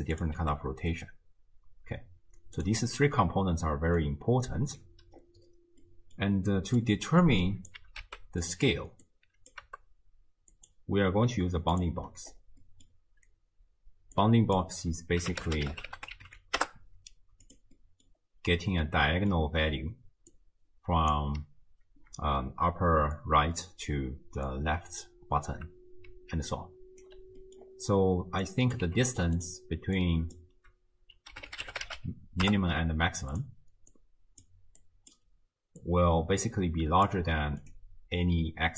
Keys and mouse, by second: 0.4 r, 3.8 d, 4.0 click, 4.8 d, 4.9 d, 5.9-6.2 middle drag, 6.8-7.7 drag, 7.8 g, 9.0-9.5 drag, 9.7 g, 11.1 g, 12.6 middle drag, 14.2-17.5 drag, 17.8 middle drag, 18.8-19.3 drag, 18.8-19.3 right drag, 19.8-21.3 typing, 20.3 click, 26.1 d, 26.5 click, 27.1 d, 27.1 d, 27.4 middle click, 28.5 drag, 28.9 g, 29.4 click, 30.0-33.4 drag, 33.9-34.4 drag, 34.8 click, 35.8-37.6 drag.